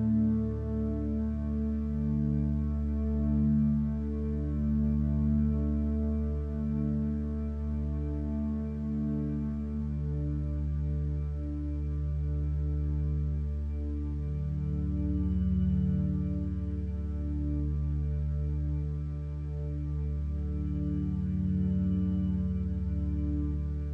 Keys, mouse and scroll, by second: 11.3 ctrl+t, 23.1 b.